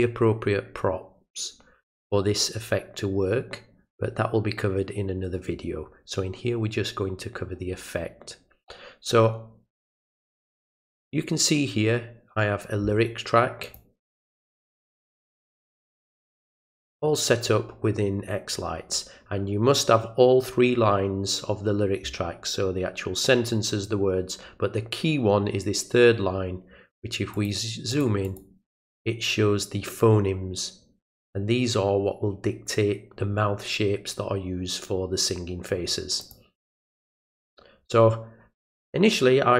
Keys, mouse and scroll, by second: 13.6 click, 14.1 click, 15.7-16.7 drag, 27.3 click, 27.9 click, 28.2 click, 36.2 click, 36.5 click, 36.8 click, 37.0 click.